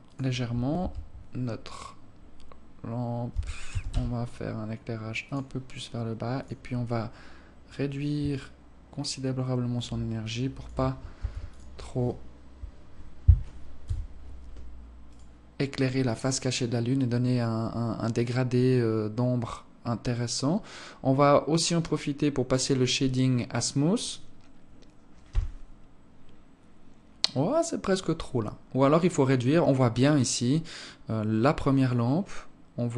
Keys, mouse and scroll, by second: 0.3 KP_3, 2.8 r, 5.9 click, 7.8 shift+click, 10.7 ctrl+s, 13.4 KP_1, 14.6 right click, 15.2 right click, 22.0 click.